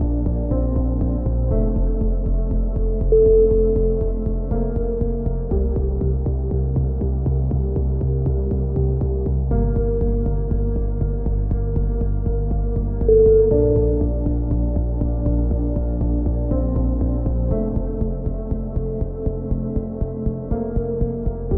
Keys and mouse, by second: 0.2 z, 0.7-3.9 middle drag, 1.3 z, 2.1 z, 3.9 right click, 4.7 c, 7.9 right click, 8.2 click, 10.2 c, 11.1 right click, 11.9 click, 13.3 a, 13.5 z, 13.8 Tab, 14.3 z, 14.7-15.7 drag, 16.6 KP_3, 17.2 z, 17.5 click, 17.9 z, 18.4 click, 18.9-20.2 drag, 20.2 middle click, 20.5 Tab, 21.0 click, 21.3 click.